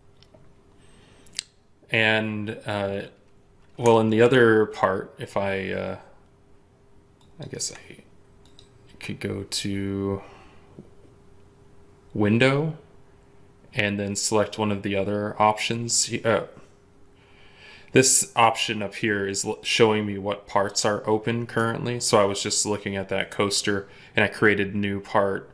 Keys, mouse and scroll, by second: 7.0 ctrl+click.